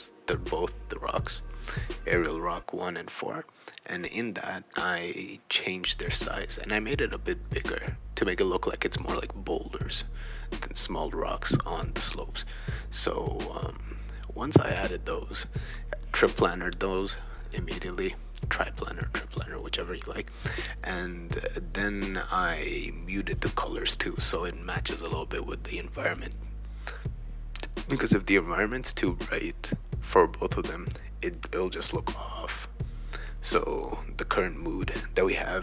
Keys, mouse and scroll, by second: 1.2 click, 1.3 click, 1.5 click, 2.3 click, 3.5 click, 4.6 click, 4.9 click, 6.6-8.1 drag, 8.3 click, 8.7 click, 9.5 click, 9.8 click, 10.6 click, 10.8-12.9 typing, 10.8 right click, 11.6 click, 11.7 shift+right click, 14.6 BackSpace, 14.9 BackSpace, 15.3 BackSpace, 17.0 right click, 17.8 click, 18.5 BackSpace, 19.3 right click, 20.3 click, 21.8 BackSpace, 23.4 click, 24.2-25.6 drag, 25.7 click, 26.1-27.2 drag, 27.4 click, 28.1 right click, 28.3-30.1 typing, 32.0 click, 33.1-35.1 drag.